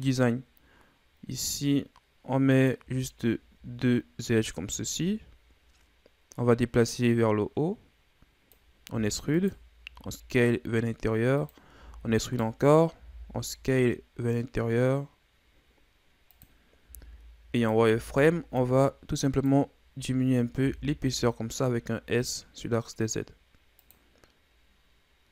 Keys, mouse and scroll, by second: 3.1-4.8 scroll up 3, 4.8-5.2 scroll up 2, 5.8 scroll up 1, 6.9-9.0 drag, 9.0 e, 9.9 s, 11.8 e, 13.0 s, 16.9 z, 17.6 right click, 17.9 b, 20.0 z, 20.6 s.